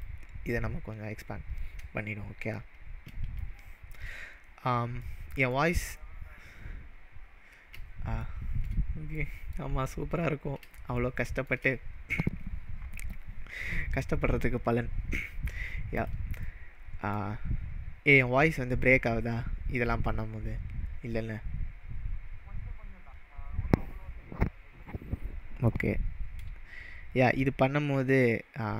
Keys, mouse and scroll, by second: 3.6 shift+middle click, 5.2-5.5 middle drag, 7.6-8.8 middle drag, 10.1-10.6 scroll up 2, 11.0-11.5 shift+middle drag, 16.0 click, 16.4-21.4 middle drag.